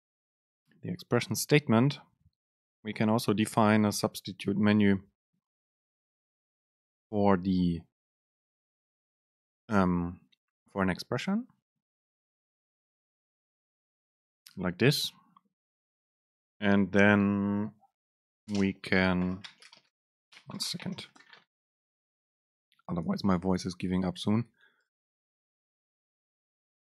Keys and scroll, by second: 13.0 super+space.